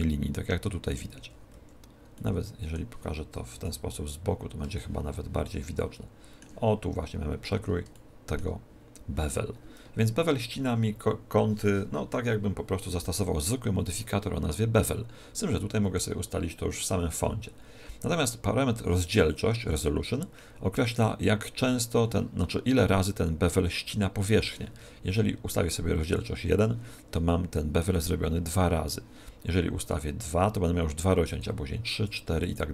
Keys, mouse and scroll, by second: 1.5 z, 2.1 middle click, 3.3 KP_1, 3.5 KP_3, 4.3-4.7 scroll down 4, 4.7 shift+middle click, 6.9-7.9 scroll up 7, 7.9 shift+middle click, 7.9 scroll up 1, 25.9 click, 30.1 click, 31.2 click, 32.3 click.